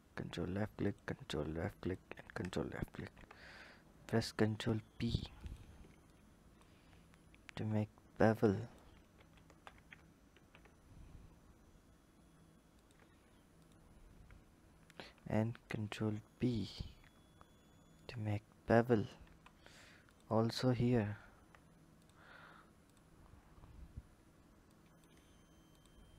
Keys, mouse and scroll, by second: 0.6 ctrl+click, 1.6 ctrl+click, 2.6 ctrl+b, 5.8 click, 6.9-7.4 scroll up 2, 7.4 Tab, 8.2 click, 9.0 ctrl+z, 9.3 ctrl+z, 10.0 ctrl+b, 13.4 alt+click, 14.6 ctrl+b, 16.8 Tab, 17.8 click, 19.1 Tab, 19.8 alt+click, 21.7 click, 22.6 click, 23.3-24.5 scroll up 1, 24.5-25.6 drag.